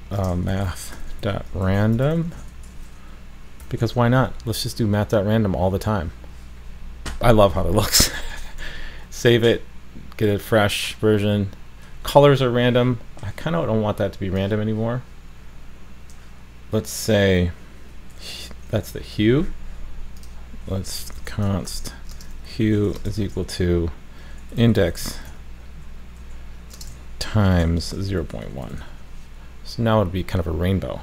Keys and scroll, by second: 3.8 super+s, 8.6 super+s, 10.3 super+s, 12.0 super+s, 28.9 super+s.